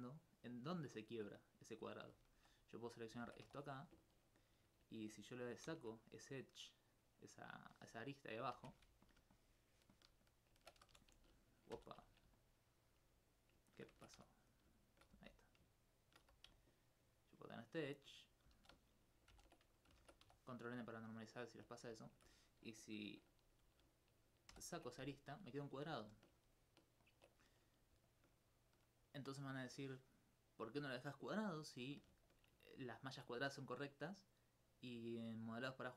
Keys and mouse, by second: 2.6 right click, 3.2 ctrl+Tab, 3.4 ctrl+2, 3.6 right click, 5.7 ctrl+x, 7.3 right click, 8.1 middle click, 8.6 shift+space, 9.0 alt+click, 9.2 alt+click, 11.7 ctrl+n, 12.4 alt+click, 13.3 alt+click, 14.3 alt+click, 14.5 right click, 14.8 shift+right click, 15.4 right click, 15.8 shift+right click, 17.4 alt+click, 18.0 right click, 18.4 a, 18.6 a, 19.3 ctrl+n, 20.0 ctrl+Tab, 20.2 ctrl+2, 20.6 right click, 21.8 right click, 22.0 alt+click, 24.5 ctrl+x, 25.8 ctrl+z, 30.4-32.1 middle drag, 33.9 middle click.